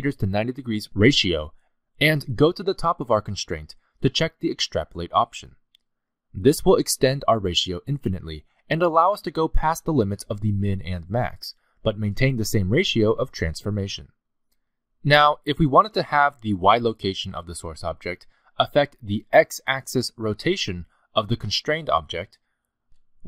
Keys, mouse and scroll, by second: 0.2 click, 2.3 click, 6.3 click, 7.2 click, 7.7 g, 11.0 scroll down 2, 11.7-12.1 scroll down 3, 11.7 g, 17.4-17.7 scroll up 4, 17.7 g, 19.1 click, 19.7 middle click.